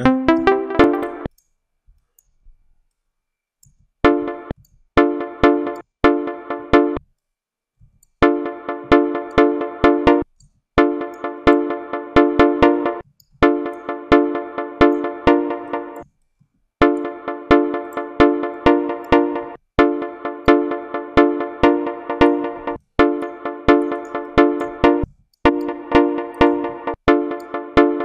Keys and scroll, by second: 0.0-1.0 typing, 3.9 space, 4.8 space, 8.0 space, 10.0 space, 10.6 space, 12.8 space, 15.9 space, 16.6 space, 19.4 space, 22.7 space, 24.9 ctrl+space, 26.7 space.